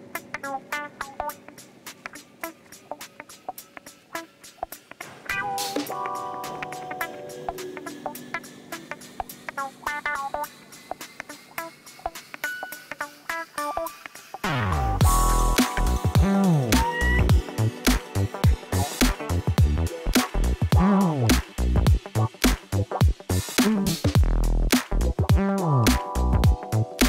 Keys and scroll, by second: 0.2 Return, 4.3 g, 4.4 z, 5.3 r, 6.7 shift+d, 6.8 shift+z, 8.2 s, 9.0 g, 9.0 z, 10.1 m, 13.6 2.